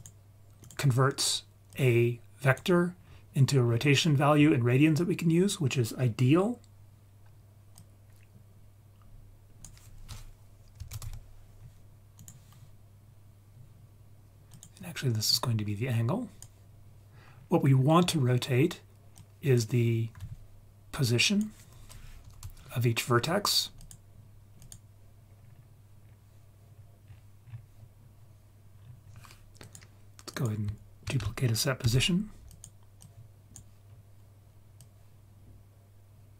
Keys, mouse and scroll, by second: 0.6 click, 1.7-2.6 drag, 2.9-3.4 scroll down 4, 3.7-4.2 scroll down 2, 4.1-6.9 scroll up 6, 7.8-12.3 drag, 14.5 click, 15.3-16.4 drag, 17.4-17.7 scroll down 3, 17.7-18.4 scroll up 4, 19.2-19.6 drag, 21.0-23.9 drag, 24.6 click, 25.3-26.7 scroll down 5, 26.7 scroll down 1, 27.0-28.8 scroll down 5, 28.8-29.2 scroll up 3, 29.6 click, 30.3 click, 31.8 shift+d, 32.5 click, 33.0 click, 33.9-34.7 scroll up 2, 34.8-36.3 drag.